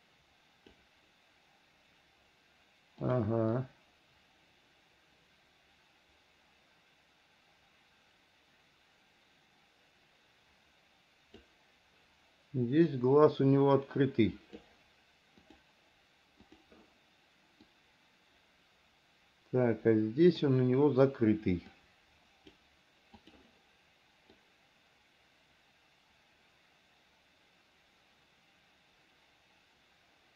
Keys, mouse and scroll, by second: 3.3 click, 3.8-11.7 drag, 13.1-14.8 drag, 15.7 click, 16.7 click, 17.9-20.7 drag, 21.9 click, 23.4 click, 24.6-30.3 drag.